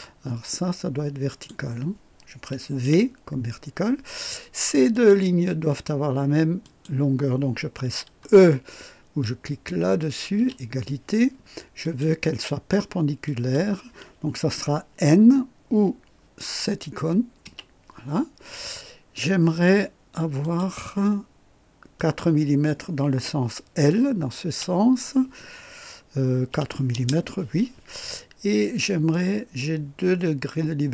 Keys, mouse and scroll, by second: 1.3 click, 2.8 v, 4.9 click, 6.6 click, 10.3 e, 11.8 click, 13.2 click, 17.4 n, 20.4 click, 21.9 click, 24.4 l, 26.4 KP_4, 26.9 Return, 26.9 KP_Enter, 29.1-30.9 drag.